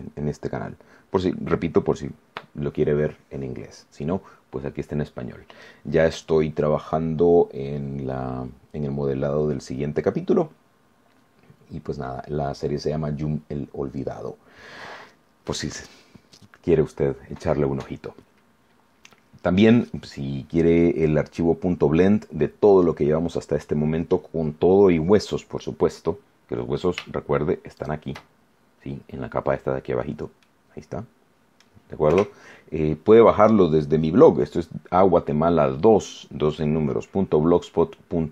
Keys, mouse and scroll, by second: 16.8 scroll up 2, 17.2 scroll down 2, 19.7 scroll down 2, 20.7-21.0 scroll down 2, 21.3 scroll down 2, 27.7 shift+click, 30.4-31.7 middle drag, 32.0 KP_0.